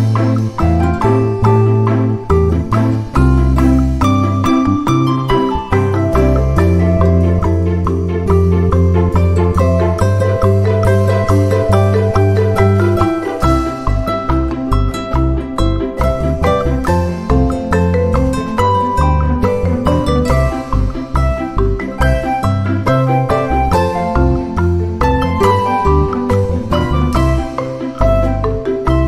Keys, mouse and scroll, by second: 0.3 ctrl+d, 1.7-2.9 drag, 4.4 shift+click, 7.6 ctrl+scroll down 2, 8.1-9.2 ctrl+middle drag, 9.4 d, 10.1 click, 11.1 click, 11.8-12.2 ctrl+scroll up 2, 12.7 ctrl+click, 13.9-15.1 drag, 15.8 click, 16.8 ctrl+d, 17.7 ctrl+shift+click, 18.9 ctrl+shift+click, 19.9 click, 20.9-25.1 drag, 25.3 shift+click, 26.4 ctrl+-, 27.7 ctrl+z, 28.5 ctrl+click.